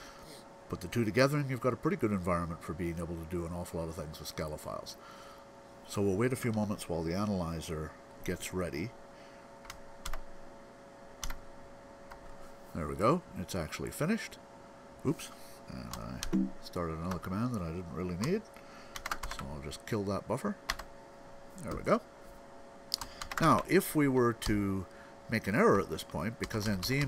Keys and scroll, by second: 9.0 alt+., 12.3 ., 16.1 ctrl+g, 18.9 ctrl+x, 19.1 k, 23.1 x, 23.3 o, 24.3 Down, 24.6 Down.